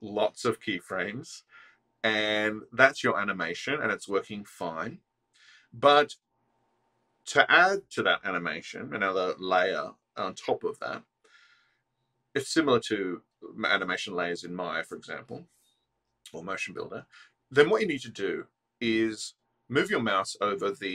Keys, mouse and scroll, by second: 0.3 click, 0.8-1.1 drag, 1.2 space, 4.8 space, 5.3 click.